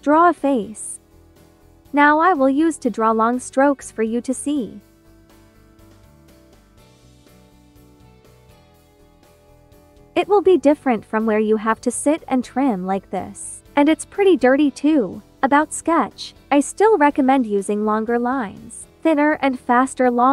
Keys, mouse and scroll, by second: 0.3 click, 3.6 click, 5.1 ctrl+z, 5.9-7.5 drag, 15.8 ctrl+z, 17.7 space, 17.8 click, 18.5 ctrl+z, 20.2 space.